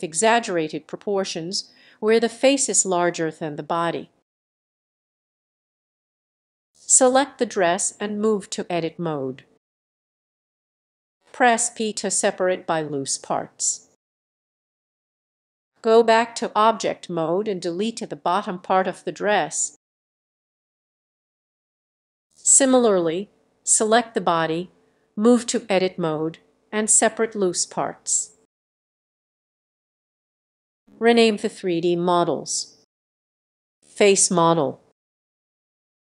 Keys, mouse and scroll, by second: 1.7 click, 1.8-2.7 scroll, 2.9 middle click, 3.5 s, 4.5 click, 4.6 g, 6.3 click, 6.5-7.6 scroll down 2, 7.6 click, 8.9 Tab, 11.3 p, 13.6 click, 14.5-15.1 scroll, 15.1-15.5 scroll, 16.0-16.4 scroll, 16.5 Tab, 18.4 click, 20.5 Delete, 21.0-21.7 scroll, 22.4 click, 23.9 Tab, 25.2 p, 27.0-28.6 drag, 28.6 Tab, 31.1 middle click, 31.1-31.7 scroll, 32.1 click, 33.7 click, 34.0-34.8 typing, 35.5 click.